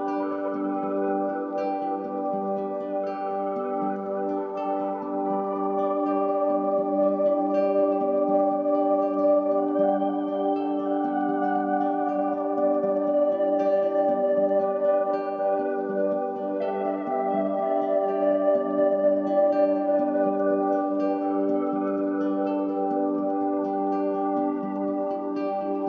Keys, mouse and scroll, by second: 0.8 shift+click, 13.4 shift+click, 14.7 ctrl+g, 16.1 click, 17.9-25.8 drag.